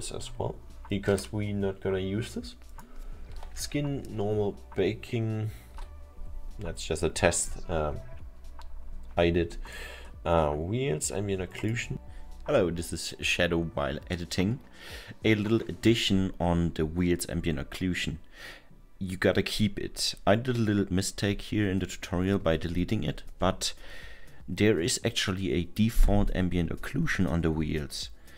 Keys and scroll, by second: 5.8 Delete.